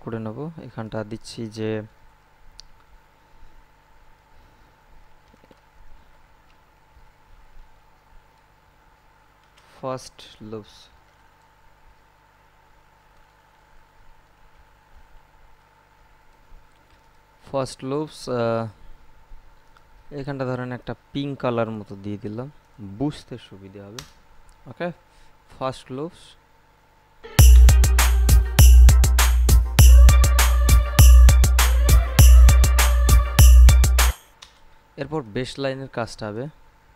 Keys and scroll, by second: 4.9-7.1 typing, 9.3-11.2 typing, 14.4 o, 14.8 p, 15.3 s, 23.8 Return, 27.4 space, 34.3 space.